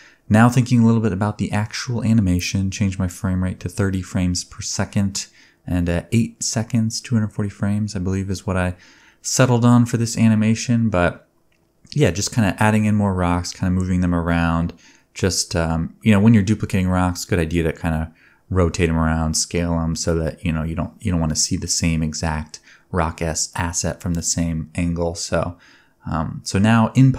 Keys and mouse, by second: 0.1-1.2 shift+drag, 0.9 alt+d, 1.1 g, 1.2 shift+middle click, 2.0 click, 2.1 shift+middle click, 2.3 g, 2.8-4.6 drag, 3.5 r, 4.2 r, 4.6-5.8 middle drag, 5.0 g, 5.8 click, 5.8-6.3 middle drag, 6.4 g, 7.1 g, 8.1 click, 8.3 g, 8.6-11.5 drag, 10.3 r, 11.5-14.9 shift+middle drag, 11.7 click, 14.4 ctrl+Tab, 14.9-20.6 drag, 20.6 middle click, 20.8-22.8 drag, 22.1 middle click, 22.1 right click, 23.9 click, 23.9 middle click, 23.9 right click.